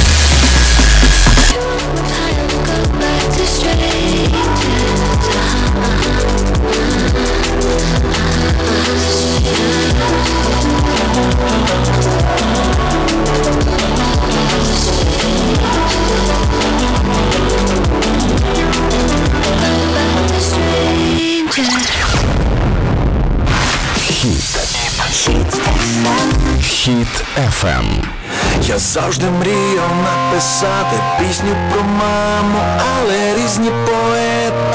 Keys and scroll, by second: 1.4 Page_Down.